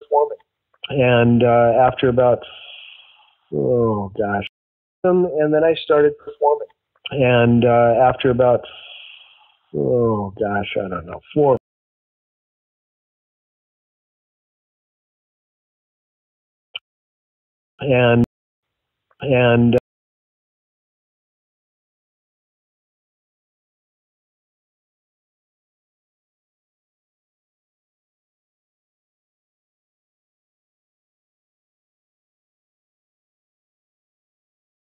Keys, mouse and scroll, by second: 1.6 click, 2.6 click, 3.7 click, 4.3 space, 4.9 click, 4.9 space, 9.7 click, 10.8 click, 11.5 space, 12.9 click, 15.1-16.5 drag, 16.7 space, 17.5 ctrl+shift+Delete, 17.7 space, 18.1 space, 18.4 click, 18.5 space, 19.7 space, 20.0 click, 21.1 click, 23.1 click, 23.6 ctrl+s, 24.2 space.